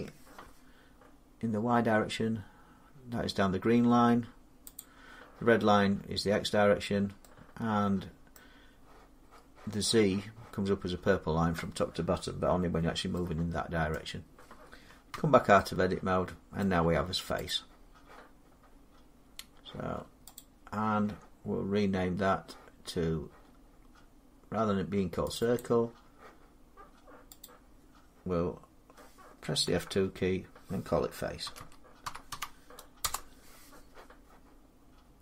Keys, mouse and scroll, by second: 1.0 middle click, 4.6-8.2 drag, 8.2-13.3 middle drag, 15.0 Tab, 16.4-17.3 scroll, 17.3 click, 20.2 click, 25.2 click, 25.4 click, 27.3 click, 29.5 F2, 31.3-32.9 typing.